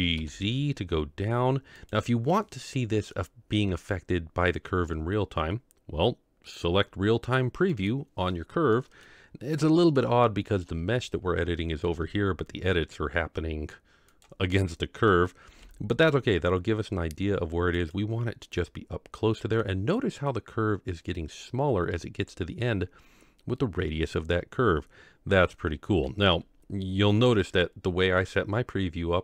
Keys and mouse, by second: 2.3 middle click, 7.7 click, 8.7-9.0 middle drag, 9.5-9.9 middle drag, 10.2-10.6 shift+middle drag, 11.8 g, 14.5-15.1 middle drag, 15.5 g, 18.6-19.6 middle drag, 25.3-27.1 middle drag.